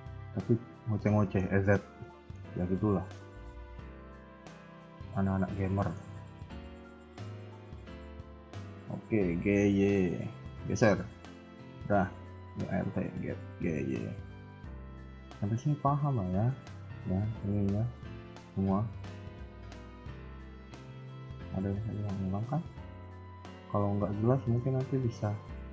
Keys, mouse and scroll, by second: 0.1-0.8 scroll up 2, 0.8 scroll up 1, 1.0 shift+middle click, 1.5-1.9 scroll up 1, 2.0 shift+middle click, 2.3 scroll up 2, 2.5 KP_1, 3.1 KP_3, 3.8 s, 5.3 scroll down 3, 5.7 shift+middle click, 6.7 alt+click, 7.2 g, 9.8 g, 12.1 a, 12.2 a, 12.8 alt+click, 13.5 g, 15.4-15.9 scroll down 3, 15.6 KP_1, 16.2 shift+middle click, 20.7 KP_3, 21.2 shift+middle click, 21.5-21.9 scroll up 2, 22.2-22.5 scroll up 3, 22.3 shift+middle click, 22.6 a, 22.7 a, 23.2 b, 24.3 shift+middle click, 24.7-25.1 scroll down 3, 24.9 KP_1, 25.1 KP_3.